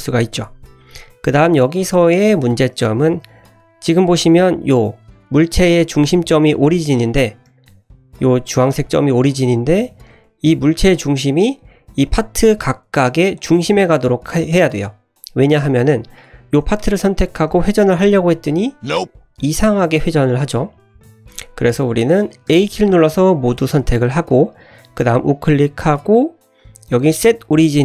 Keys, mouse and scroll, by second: 0.3-1.1 middle drag, 3.4 middle click, 4.6 middle drag, 6.9 middle drag, 7.4 g, 9.7 ctrl+z, 11.2 middle click, 12.0 click, 12.6 click, 13.3 click, 13.7 click, 14.1-14.4 middle drag, 15.1-15.6 scroll down 2, 15.6-16.2 drag, 16.8 middle click, 17.3 r, 20.9 ctrl+z, 21.2-21.9 middle drag, 22.5 a, 24.3-25.2 scroll up 1, 25.2-27.8 right drag.